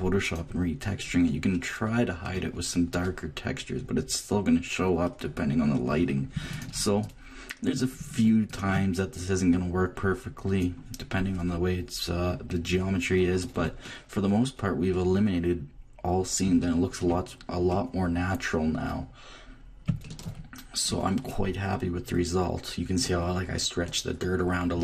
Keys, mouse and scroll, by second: 1.2-3.2 middle drag, 3.2 click, 6.0 middle click, 6.5-10.9 drag, 10.9 middle click, 11.0 click, 12.5-13.5 drag, 14.8-19.6 drag, 20.0 click, 20.8-22.2 middle drag.